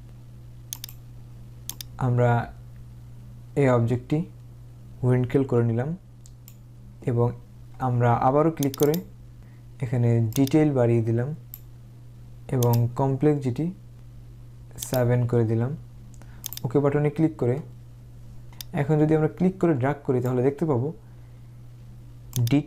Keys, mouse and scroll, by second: 0.8 click, 1.8 click, 8.7 click, 10.5 click, 12.9 click, 14.9 click, 16.6 click, 18.6 click, 22.4-22.6 drag.